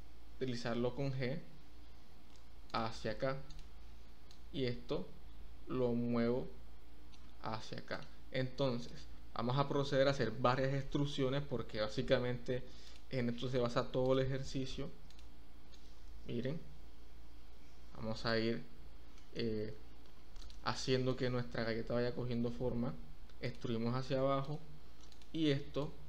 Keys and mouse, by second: 4.4-7.1 drag, 7.9 click, 10.5 shift+middle click, 10.6 shift+click, 11.4 e, 11.9 z, 14.1 click, 15.0 click, 15.7-18.3 drag, 19.1 shift+middle click, 20.4 click, 22.0 e, 22.6 z, 23.4 click, 24.4 click, 25.1 click, 25.8-26.0 drag.